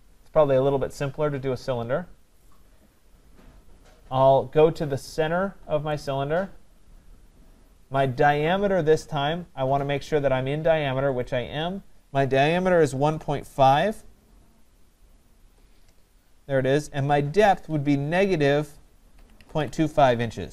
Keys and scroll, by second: 15.4 Return.